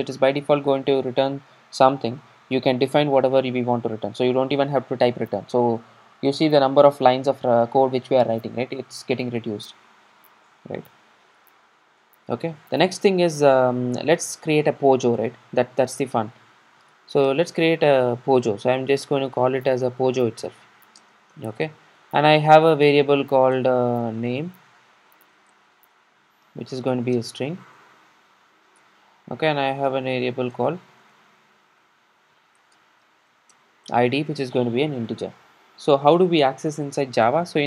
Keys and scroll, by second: 30.6 Return.